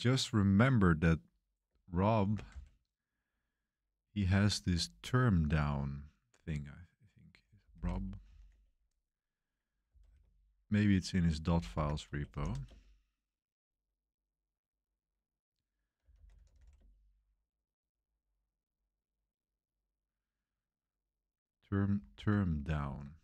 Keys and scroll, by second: 2.2 ctrl+b, 2.4 c, 7.1-12.9 typing, 15.7-17.0 typing, 22.1 super+1, 22.7 super+t.